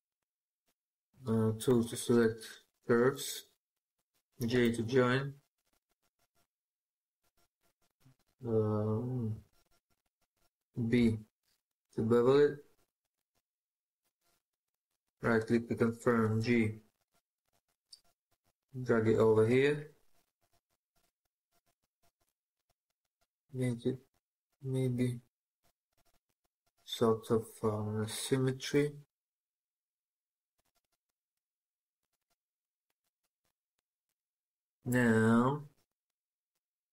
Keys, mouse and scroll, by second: 1.5 typing, 4.3 typing, 5.9 scroll down 1, 6.0-6.4 scroll up 1, 6.4 scroll down 1, 6.6-7.3 scroll up 1, 7.1-8.2 typing, 14.5 right click, 16.2 typing, 29.9 right click, 32.7 right click, 32.7 scroll up 1, 33.7 shift+middle click, 35.1 scroll up 1, 35.3 scroll down 1, 35.3-35.7 scroll up 1, 35.7 scroll down 1, 35.8-36.9 scroll up 1.